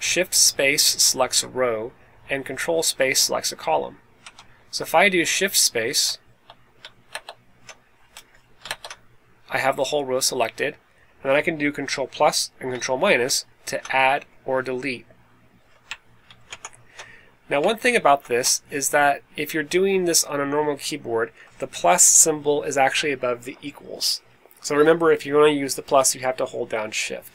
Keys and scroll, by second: 4.2 Up, 5.9 space, 8.0 Escape, 13.2 shift+=, 14.0 Escape, 18.0 shift+super+=.